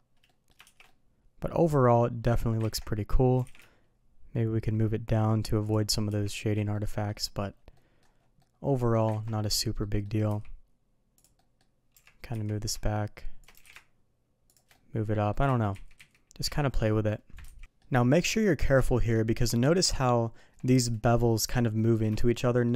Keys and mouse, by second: 0.2 middle click, 0.6 shift+2, 0.8-2.2 middle drag, 2.6 ctrl+z, 3.3 g, 6.1 shift+2, 6.7-7.0 middle drag, 7.7 middle drag, 8.4-8.9 middle drag, 9.1 ctrl+z, 9.8 middle click, 10.2 s, 11.3 middle click, 11.9 g, 13.5 g, 14.7 middle click, 15.5-16.5 ctrl+z, 17.6 middle click, 18.0 shift+middle drag, 18.4 middle drag, 18.8 shift+middle drag, 19.4 middle click, 19.9-20.3 shift+middle drag, 21.7 middle drag, 22.2-22.6 shift+middle drag.